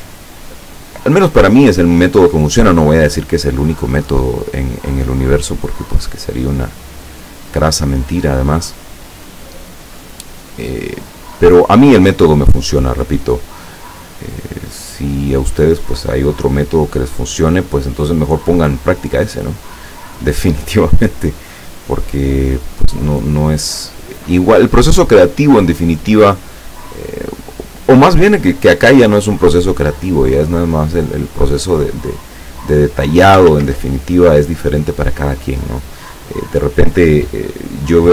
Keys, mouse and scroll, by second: 0.3 ctrl+scroll up 2, 1.3-1.8 ctrl+scroll up 2, 1.9 ctrl+scroll down 2, 3.3 click, 4.0-11.5 drag, 13.1 click, 13.9-17.4 drag, 18.1 click, 18.6-20.6 drag, 21.4-24.1 drag, 25.1 click, 26.7-28.4 drag, 30.4-32.2 drag, 33.5 ctrl+z, 36.8-38.1 drag.